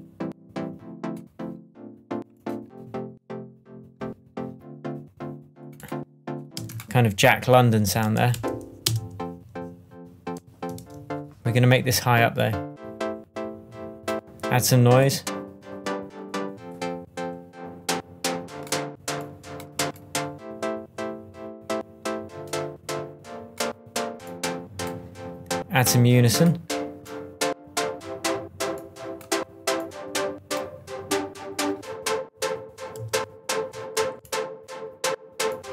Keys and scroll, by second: 6.5 space, 7.9 super+a, 8.3 shift+super+Up, 8.8 shift+space, 10.8 shift+Tab, 32.9 alt+m.